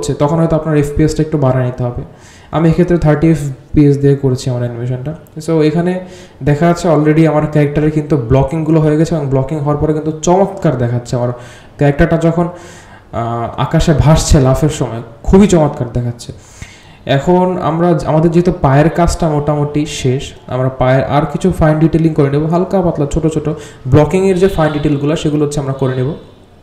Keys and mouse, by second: 6.0 space, 6.3-7.7 drag, 8.5 g, 9.5-10.6 drag, 11.0 space, 13.5 space, 13.9-15.8 drag, 17.4-18.2 drag, 19.3-20.0 drag, 20.3 g, 21.1-21.7 drag, 22.2 click, 22.3 space.